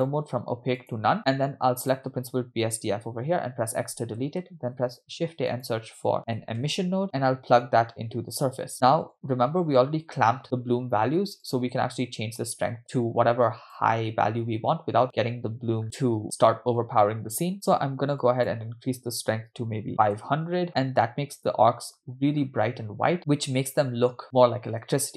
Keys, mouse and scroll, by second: 0.0-1.0 drag, 1.3 drag, 1.9 click, 3.7 x, 4.6 shift+a, 7.6-8.7 drag, 8.8-9.8 scroll up 5, 11.4 click, 15.8-16.8 scroll up 1, 16.8-18.2 scroll up 2, 18.2-20.2 drag, 20.1 0, 21.1-22.2 scroll up 2, 22.2-23.1 scroll up 1, 23.2-23.5 scroll down 4.